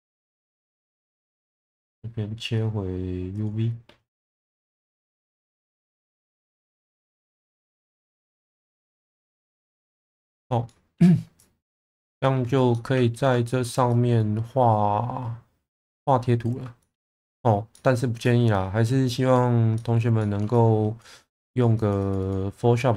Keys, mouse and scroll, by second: 1.6-3.5 drag, 5.2 shift+middle click, 6.0 Tab, 6.6 Tab, 7.0 click, 7.4 click, 7.8 1, 8.3-10.1 drag, 10.6 middle click, 11.3 click, 12.7 alt+middle click, 13.4 shift+middle click, 13.9-16.5 drag, 16.7 shift+middle click, 17.7 middle click, 18.2-19.4 drag, 19.7 middle click, 20.1 shift+middle click, 20.5 click, 21.4 click, 21.7 click, 22.0 click.